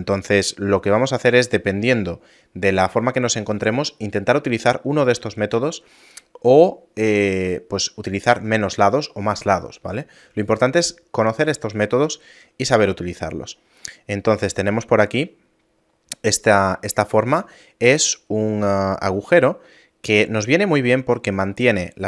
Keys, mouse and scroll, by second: 6.3 shift+middle click, 7.6 middle click, 7.9 scroll down 1, 9.3 shift+middle click, 12.7-13.4 scroll down 1, 13.4 scroll up 2, 14.1 middle click, 14.1-14.7 scroll up 1, 14.7 shift+middle click, 15.6 middle click, 16.9 shift+middle click.